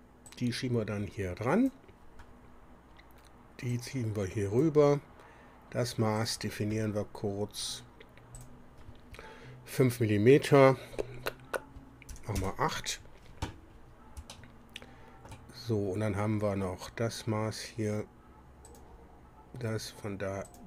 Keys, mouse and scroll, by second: 0.3-1.9 drag, 3.7-4.8 drag, 6.2 click, 8.4 click, 12.1 KP_8, 12.4 KP_Enter, 14.3-15.5 shift+drag, 18.7 click, 20.5 click.